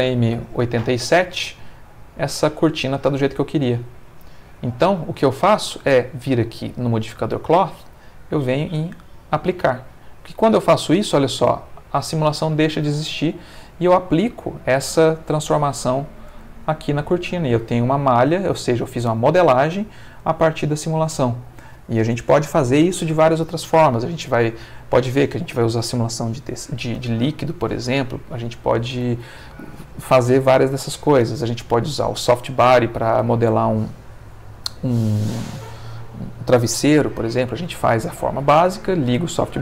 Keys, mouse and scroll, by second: 1.5-4.7 middle drag, 7.4 click, 8.0 click, 9.0 click, 11.0 click, 12.8-13.8 middle drag, 13.8 Tab, 14.3-16.5 middle drag, 16.4 Tab, 16.8-18.2 ctrl+middle drag, 18.3-21.8 ctrl+middle drag, 23.9 middle click.